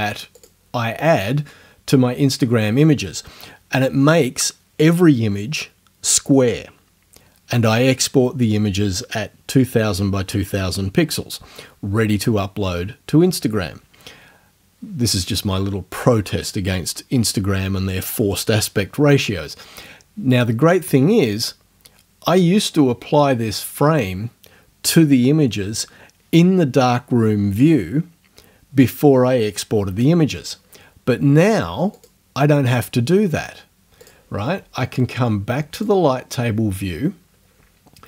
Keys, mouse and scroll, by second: 0.4 click, 32.0 click, 34.0 click, 35.8 click.